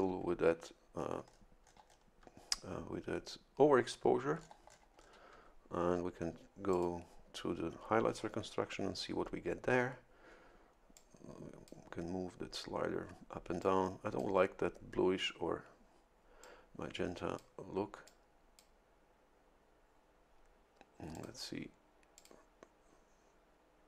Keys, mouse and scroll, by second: 1.3-2.3 ctrl+scroll up 4, 4.4-5.3 ctrl+scroll down 2, 6.8 click, 10.9-12.0 drag, 13.6 click, 16.4-17.6 drag, 18.1 click, 21.1 click, 22.2 click.